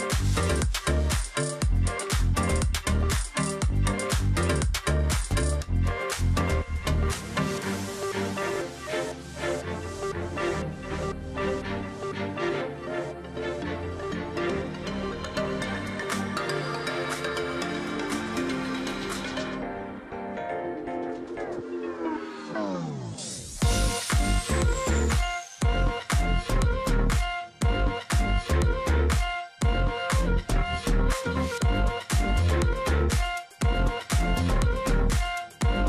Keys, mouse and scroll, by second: 0.7 alt+click, 2.9 alt+click, 3.1 alt+scroll down 1, 3.4 space, 3.7-4.2 alt+scroll up 1, 5.8 space, 7.1 space, 8.8 alt+scroll down 1, 9.0-9.4 alt+scroll up 1, 9.8 space, 11.4 space, 13.7 space, 14.6 space, 16.0 space, 18.8 space, 20.3 space, 22.7 space, 23.6 space, 26.5 space, 28.7 ctrl+click, 29.9 alt+scroll down 1, 30.2 space, 30.6 ctrl+click, 30.8 alt+scroll up 1, 31.4 space, 32.1 space, 32.9-33.4 alt+scroll up 1, 33.6 space, 34.8 space.